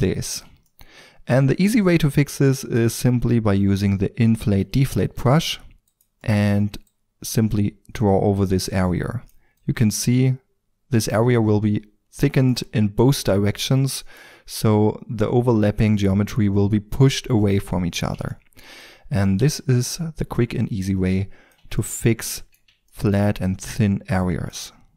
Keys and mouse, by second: 1.2-1.8 drag, 2.7-5.1 drag, 5.7 f, 6.9-8.6 drag, 11.3 middle drag, 11.8-15.8 drag, 18.4 click, 18.6 drag, 18.8-20.2 middle drag, 20.2-21.8 drag, 21.8-23.4 middle drag, 23.4-24.5 drag.